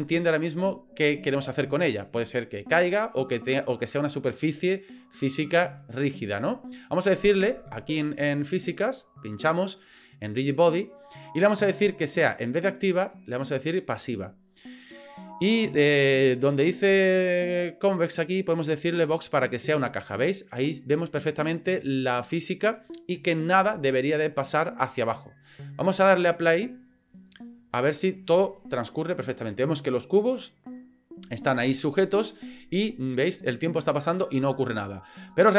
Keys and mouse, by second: 9.2 click, 10.5 click, 13.0-14.1 drag, 18.0-19.1 drag, 20.1-20.8 middle drag, 21.0-22.6 middle drag.